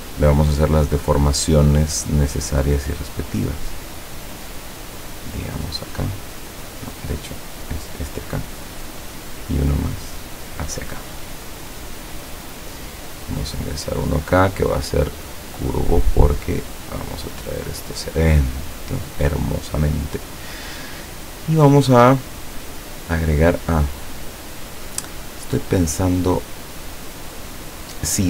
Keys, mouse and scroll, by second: 0.4 click, 1.0 click, 2.6-8.0 drag, 8.8 click, 9.4-12.5 drag, 13.4 click, 15.0 click, 16.3-18.9 drag, 22.7 click, 24.2 click, 25.9 scroll up 2, 26.8 scroll up 2, 27.4-27.7 scroll down 2, 27.9 scroll up 2.